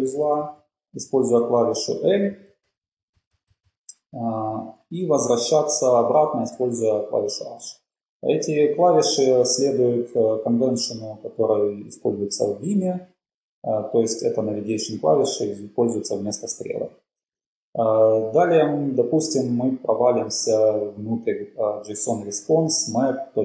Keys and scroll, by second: 0.3-0.8 typing, 1.8-3.4 typing, 4.5-5.3 typing, 6.4-7.1 typing, 17.6 typing, 20.3 l.